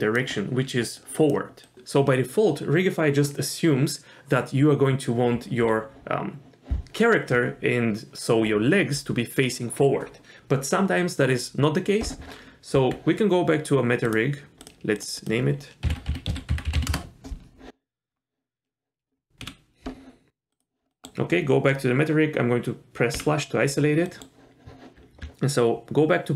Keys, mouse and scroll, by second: 0.0-1.6 typing, 1.0-1.3 drag, 1.6 click, 12.3-13.1 scroll down 2, 12.7 Tab, 14.0 click, 14.6 click, 15.0 click, 15.1-16.9 drag, 18.1 scroll up 1, 20.5 click, 20.9 middle click, 24.1 middle click, 25.2 Tab.